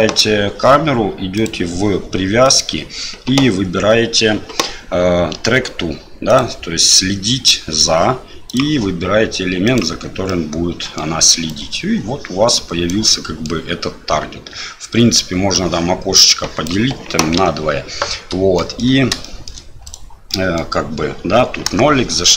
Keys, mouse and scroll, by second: 1.4 click, 2.5-6.4 drag, 8.5 click, 10.3-11.0 middle drag, 11.5-12.9 right drag, 13.1-13.5 middle drag, 15.7-16.7 drag, 18.6 shift+middle drag, 19.2 middle drag, 19.9 right click, 20.3 middle drag, 21.7 KP_0.